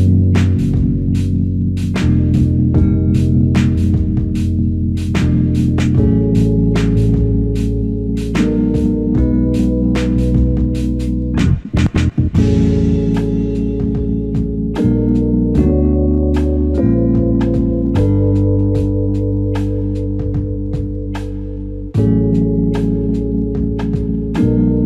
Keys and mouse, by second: 2.1 ctrl+click, 2.4 ctrl+double click, 4.3 alt+shift+click, 7.4 ctrl+click, 8.3 ctrl+i, 8.8 alt+click, 9.8 ctrl+click, 13.8 shift+click, 19.2 double click, 19.7 ctrl+click, 22.4 shift+click, 24.5 ctrl+alt+click.